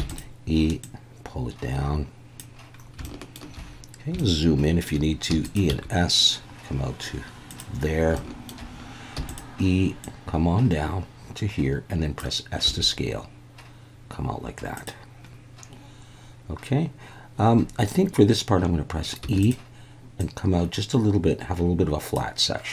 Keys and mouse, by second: 0.0 e, 0.1 click, 0.9 click, 3.1 shift+click, 4.3 shift+click, 5.3 e, 5.4 click, 5.7 s, 7.5 click, 8.3 shift+middle click, 9.2 e, 9.3 click, 12.7 s, 14.8 click, 19.2 e, 19.4 click, 20.2 click.